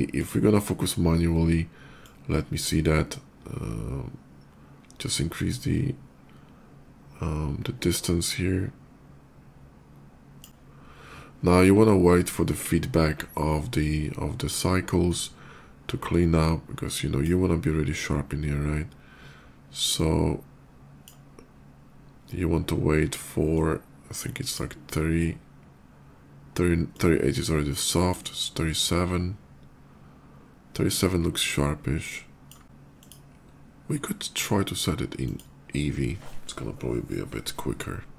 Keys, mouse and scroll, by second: 0.0 click, 1.7-10.2 drag, 11.7 shift+middle click, 14.9-17.1 shift+drag, 19.6-20.8 drag, 23.3-24.4 drag, 26.7-27.8 drag, 30.8-32.2 drag, 32.8 click, 35.0 click.